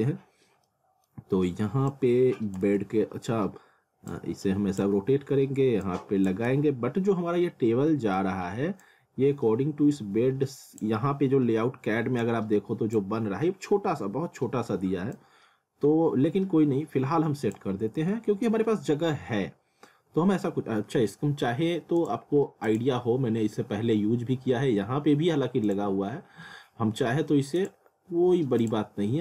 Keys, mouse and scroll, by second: 0.7 middle click, 1.9 click, 2.7-4.8 typing, 4.1 click, 5.8 click, 6.5 z, 6.8 scroll down 1, 7.7 scroll up 1, 7.9 middle click, 8.8 click, 15.1 click, 17.8-18.6 scroll down 1, 19.9 scroll up 1, 22.0 click, 23.2 scroll down 1, 24.2 scroll up 1, 25.7 click, 27.6 click.